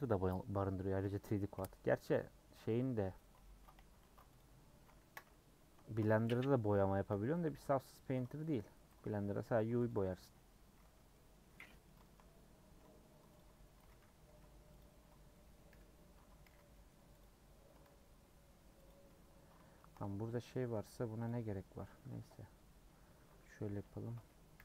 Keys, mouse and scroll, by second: 0.5 scroll down 1, 2.1 middle click, 2.6 /, 3.2 middle click, 3.4 Tab, 3.7 h, 4.1 middle click, 4.4 click, 5.0 KP_Decimal, 5.9 shift+middle click, 6.1 Tab, 6.3 middle click, 7.1 /, 7.3-8.5 middle drag, 8.9 a, 9.9 u, 10.8 middle click, 11.3-11.6 scroll up 1, 11.6 middle click, 12.2-13.2 scroll up 2, 13.2 scroll up 1, 13.4 alt+Left, 13.8 a, 14.8 u, 15.3 middle click, 15.7 /, 16.1 Tab, 16.4 h, 16.7 middle click, 17.2 click, 17.9 Tab, 18.3 Tab, 18.9 click, 19.1 Tab, 19.2 scroll up 2, 19.8 shift+middle click, 19.9-20.5 scroll up 3, 20.5 middle click, 20.8 3, 21.2 click, 21.9 KP_Add, 22.1 KP_Add, 22.3 KP_Add, 22.4 KP_Add, 23.1 KP_Subtract.